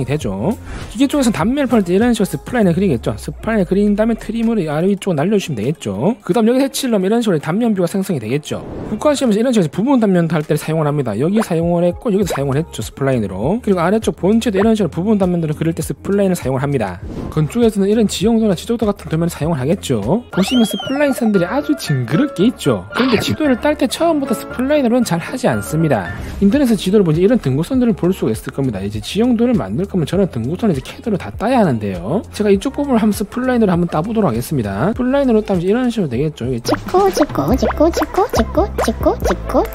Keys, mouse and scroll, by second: 0.1 click, 2.0 right click, 2.1 click, 2.7 click, 3.2 click, 3.7 click, 4.1 right click, 4.6 r, 4.7 right click, 5.0 click, 5.1 click, 5.6 click, 5.9 click, 6.0 right click, 6.4 right click, 7.1 click, 9.7 scroll up 2, 11.9 middle click, 13.8 middle click, 14.1 middle click, 14.4 middle click, 16.5 click, 18.7 middle click, 19.7-20.0 scroll up 2, 23.6 middle click, 24.7 scroll up 2, 25.1 middle click, 25.8 middle click, 27.6 middle click, 28.2 middle click, 33.0 scroll up 2, 33.8 scroll up 2, 34.2 middle click, 35.0 click, 35.8 click, 36.8 click, 37.2 click, 37.6 click, 38.1 click, 38.4 click, 38.9 click, 39.3 click.